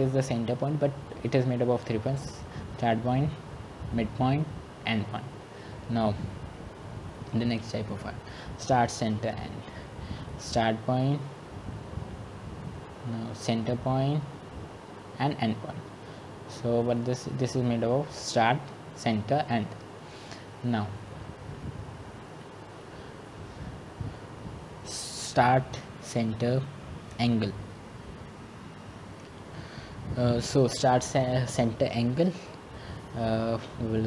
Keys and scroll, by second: 23.3-24.7 typing.